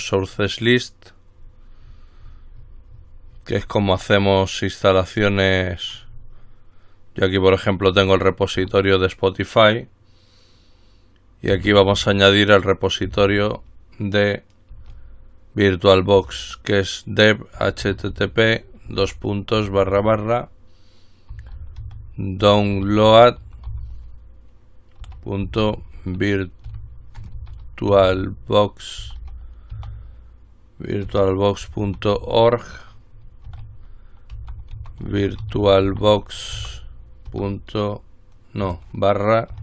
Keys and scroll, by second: 8.1 Return, 11.8 typing, 14.7-16.4 typing, 17.5-20.0 typing, 21.3-29.9 typing, 31.3-37.5 typing, 38.6-39.6 typing.